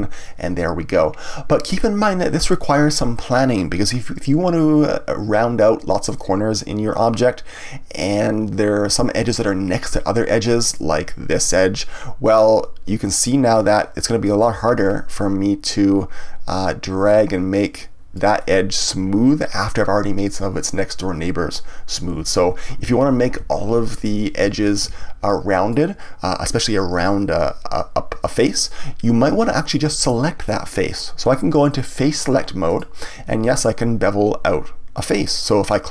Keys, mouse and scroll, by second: 10.6 click, 13.5-14.5 drag, 14.5 ctrl+z, 14.7 scroll up 1, 16.5 click, 18.4-21.4 middle drag, 22.1 ctrl+z, 25.2-28.3 middle drag, 29.2-32.1 middle drag, 32.1 right click, 32.6 click, 33.4 click.